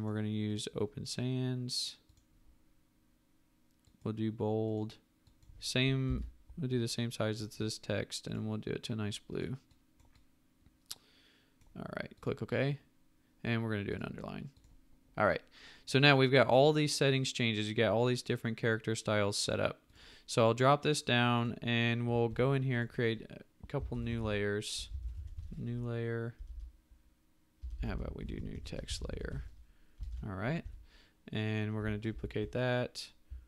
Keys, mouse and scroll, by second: 5.8-6.6 typing, 22.3 t, 23.6-26.4 typing, 27.6-30.6 typing, 30.0 ctrl+Return, 32.1 ctrl+j.